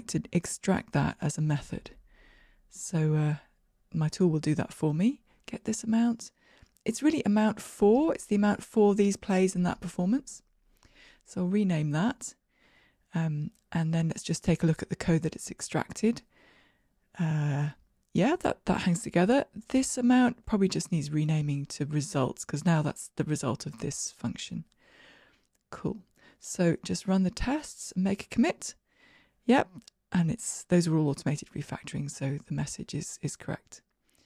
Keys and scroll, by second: 4.0 alt+super+m, 15.2 super+b, 22.3 shift+F6, 27.3 super+k, 31.8 shift+Escape, 32.7 ctrl+r, 32.7 shift+F10.